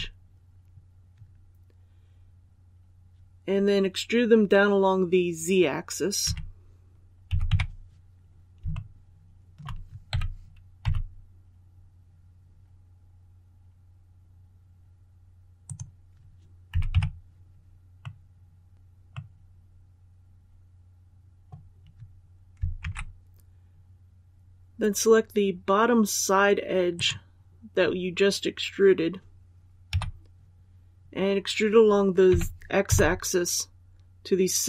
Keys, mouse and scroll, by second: 6.1 KP_3, 7.2 z, 7.4 KP_4, 8.6 shift+middle click, 10.0-10.7 typing, 15.5-16.6 drag, 16.6 z, 16.8 KP_6, 17.9-21.5 middle drag, 22.7 alt+a, 26.8 right click, 29.8 KP_7, 32.2-32.7 typing.